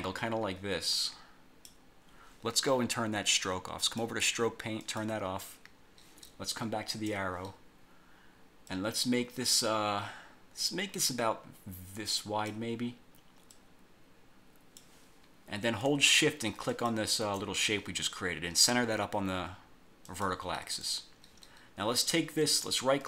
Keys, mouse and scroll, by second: 3.9 click, 4.9 click, 7.0 click, 8.8-12.8 drag, 13.6-15.0 drag, 16.8 shift+click, 20.2 click, 20.9 click, 22.1 click, 22.6 right click.